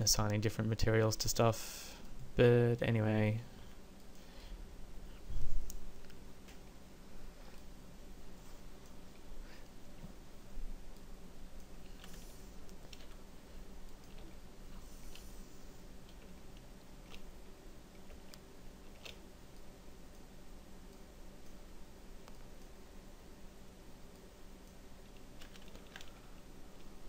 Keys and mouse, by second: 3.8 f, 13.2 f, 25.9 ctrl+z.